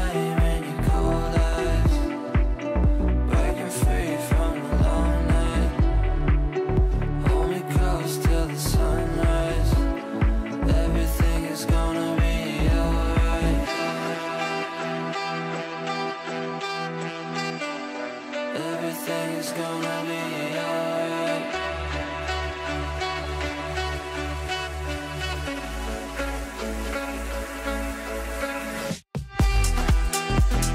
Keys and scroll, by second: 0.8 shift+F2, 1.3 F3, 7.6 ctrl+r.